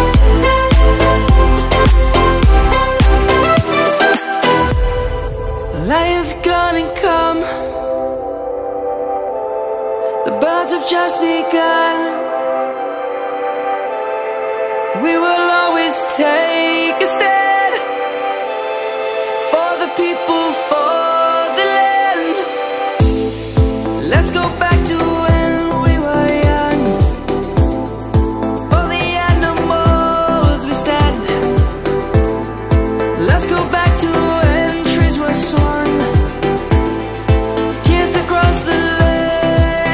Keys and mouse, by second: 0.8 middle click, 2.9 1, 4.3 shift+middle click, 6.1 Tab, 7.3 middle click, 9.1 2, 9.4 ctrl+a, 10.6 click, 11.8 1, 14.7 Tab, 15.9 middle click, 18.1 middle click, 19.5 shift+click, 20.1 middle click, 21.1 shift+click, 22.1 shift+click, 23.0 1, 24.1 1, 24.7 ctrl+b, 28.4 click, 29.3 shift+middle click, 33.8 ctrl+z, 35.9 ctrl+b.